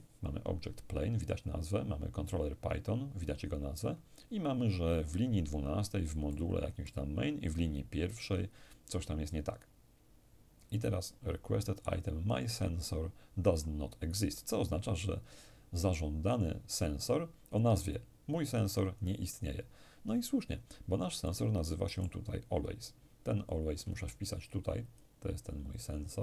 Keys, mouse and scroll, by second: 5.9-7.5 middle drag, 9.2-10.5 scroll down 1, 12.2 click, 17.6-19.6 drag, 20.9-22.6 middle drag, 24.5-26.2 drag.